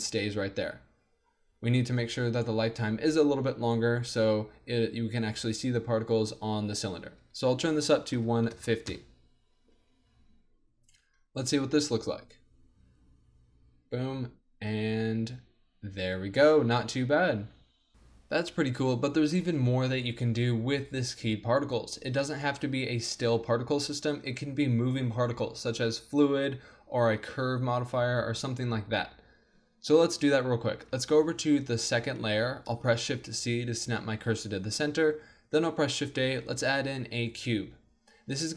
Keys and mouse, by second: 0.5 alt+a, 1.3-2.3 middle drag, 2.3-14.0 drag, 11.8 alt+a, 17.7 alt+a, 17.9-19.3 drag, 17.9 z, 21.9-31.0 middle drag, 31.0 2, 32.9 shift+c, 35.5 shift+a.